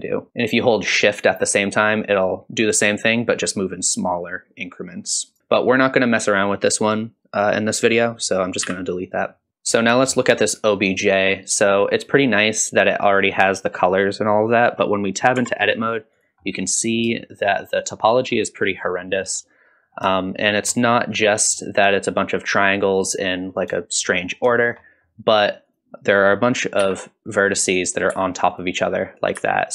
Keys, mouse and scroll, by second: 5.4 middle click, 5.4 scroll up 1, 8.6 x, 9.5 shift+middle click, 9.5 scroll up 1, 10.1 shift+middle drag, 10.9 click, 11.7-13.1 shift+middle drag, 15.4 Tab, 15.8-16.2 scroll up 1, 16.2 click, 16.4 middle click, 17.2 shift+middle click, 18.3-18.8 scroll down 1, 18.8 middle click, 19.4-20.0 scroll up 2, 20.2 shift+middle click, 21.3 middle click, 23.8 shift+middle click, 24.2 scroll up 2, 24.5 shift+middle click, 24.9 middle click, 25.7 click, 26.8 g, 27.9 click, 28.1 g, 29.2 click, 29.4 g.